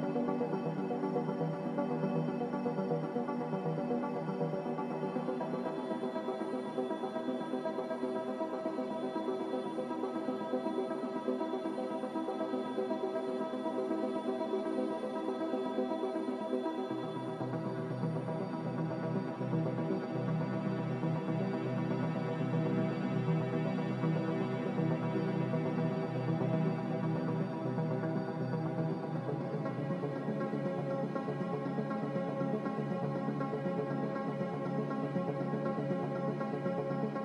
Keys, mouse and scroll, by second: 10.1 z, 19.9 ctrl+z, 20.1 ctrl+z, 30.9 Delete, 33.6-34.4 typing.